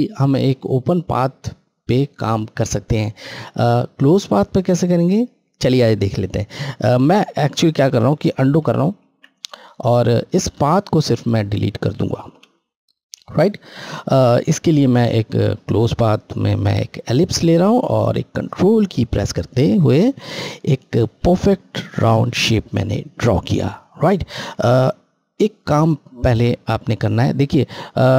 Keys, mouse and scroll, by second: 6.5 ctrl+Num_Lock, 8.4 ctrl+z, 10.3 click, 10.4 click, 12.2 Delete, 14.8 click, 17.6 ctrl+click, 24.6 click.